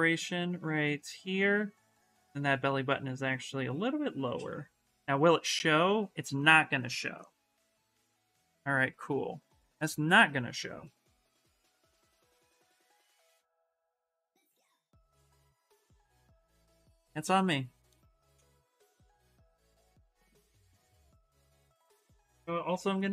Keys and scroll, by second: 20.7-23.1 typing.